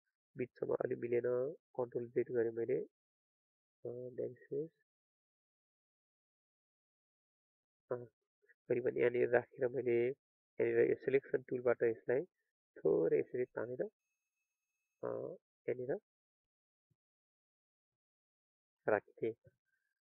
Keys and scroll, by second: 1.3 ctrl+z.